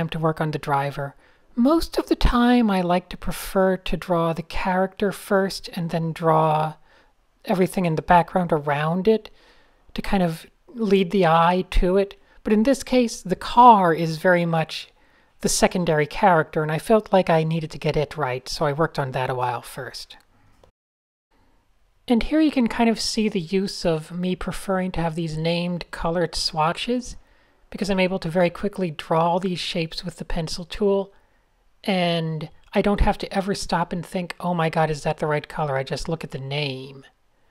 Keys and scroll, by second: 2.6 alt+shift+super+r, 3.2 alt+shift+super+r, 5.2 alt+shift+super+g, 5.3 Right, 5.5 alt+BackSpace, 5.5-6.3 typing, 9.9-12.9 typing, 11.3 Return, 14.3 alt+shift+super+r, 18.4 super+space, 20.6 n, 25.4 super+z, 32.0 a, 32.3 shift+super+{, 33.9 shift+super+a, 34.2 shift+super+a, 35.2 super+7, 36.0 super+7, 36.9 shift+super+a.